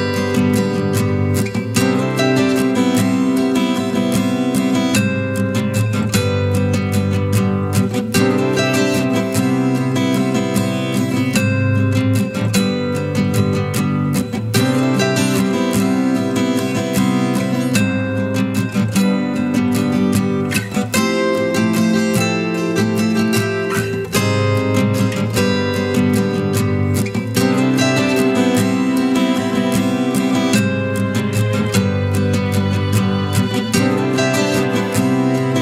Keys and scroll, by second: 13.4 ctrl+t.